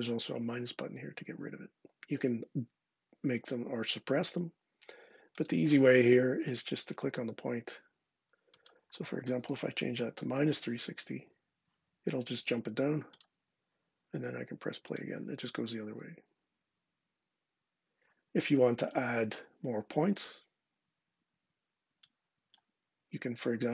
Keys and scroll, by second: 9.3-9.9 typing, 10.9 Tab.